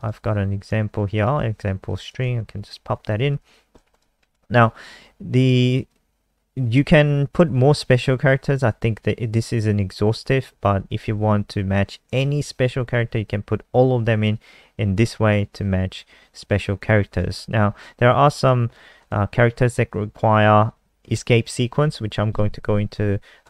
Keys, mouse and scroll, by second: 1.1 shift+click, 1.5 ctrl+c, 1.9 click, 2.6 Delete, 2.7 Delete, 3.1 BackSpace, 3.4 ctrl+v, 3.9 click, 4.3 ctrl+s, 5.9 click.